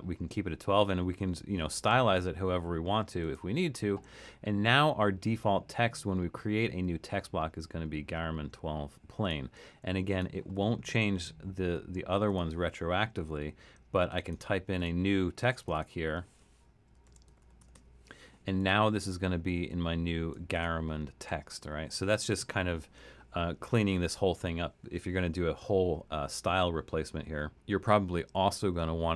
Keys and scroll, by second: 16.8-18.2 typing.